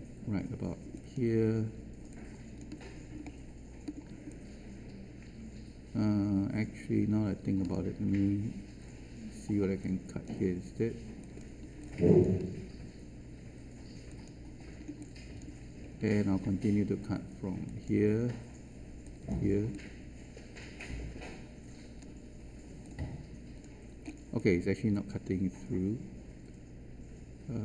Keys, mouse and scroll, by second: 0.9 click, 2.1 alt+click, 3.2 alt+middle click, 4.2-8.1 alt+drag, 9.8-11.1 drag, 11.8-14.0 alt+drag, 14.7-15.1 scroll down 1, 15.1 alt+click, 15.6-17.6 alt+scroll down 1, 17.6 click, 20.1-24.0 alt+drag, 24.0 scroll down 1, 24.4-27.6 alt+drag.